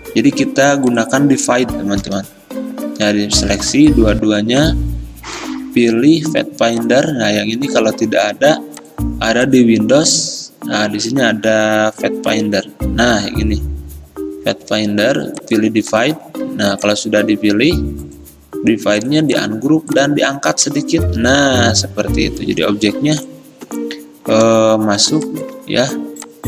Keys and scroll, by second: 2.1 Down, 4.2 ctrl+z, 20.8 Up, 20.9 Up, 21.1 Up, 21.5 Up, 21.7 Up.